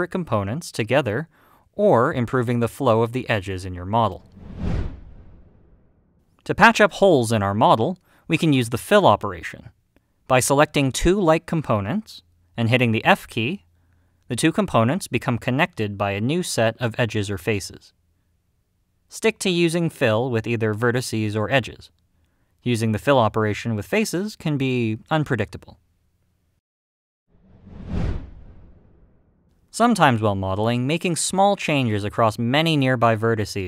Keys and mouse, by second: 8.9-10.7 middle drag, 12.5 click, 15.5 f, 22.2 click, 23.2 middle click, 27.8 f, 31.6 g, 32.1 click, 32.7 click, 33.0 g, 33.4 click.